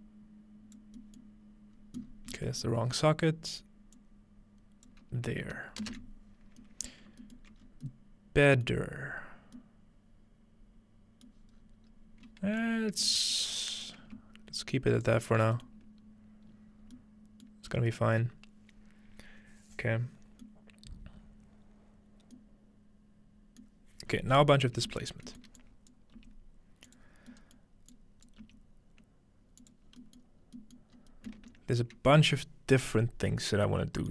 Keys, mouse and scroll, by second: 1.0-3.5 scroll up 4, 3.5-4.9 scroll up 1, 4.0-5.9 drag, 6.4-7.6 scroll down 2, 6.6-7.9 ctrl+middle drag, 7.6 scroll up 2, 8.7 scroll up 1, 9.0-9.6 middle drag, 9.0-9.6 scroll down 1, 11.4-12.6 middle drag, 11.5-12.6 scroll down 1, 12.6-16.2 drag, 15.3-15.6 scroll down 1, 15.7-16.2 ctrl+middle drag, 16.2-17.7 scroll down 2, 17.7-19.5 scroll up 2, 20.9-22.4 middle drag, 20.9-22.4 scroll down 2, 22.4-23.6 scroll down 1, 23.8-24.6 middle drag, 24.0-24.4 scroll down 2, 24.4 scroll up 2, 24.5 scroll down 1, 24.9 ctrl+space, 25.6-26.2 drag, 26.2 g, 26.9 click, 27.0 scroll down 2, 27.9-28.4 drag, 28.4 g, 28.9-31.0 drag, 29.9-31.0 scroll down 3, 30.0 middle click, 31.0 scroll up 2, 32.2-33.3 scroll down 2.